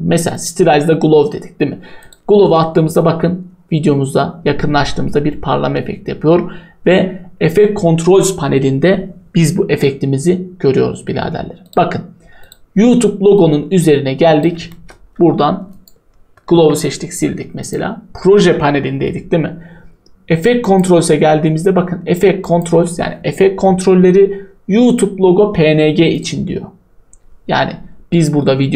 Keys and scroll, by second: 16.5 Delete.